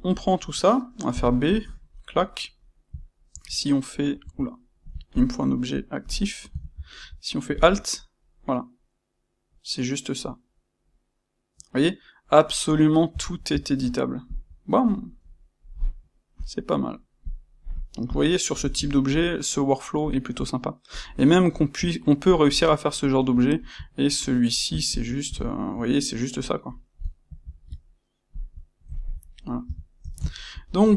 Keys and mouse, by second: 1.0 b, 3.2 shift+q, 4.2 Escape, 5.1 shift+click, 6.6 shift+q, 7.6 shift+q, 8.2-16.3 middle drag, 13.3 shift+q, 16.3-18.0 drag, 18.2-20.9 middle drag, 20.9 click, 21.2-24.0 ctrl+middle drag, 24.0 shift+q, 24.9 shift+q, 25.3 shift+middle click, 27.2 shift+q, 28.8 ctrl+middle click, 29.6 a, 30.0 ctrl+middle click.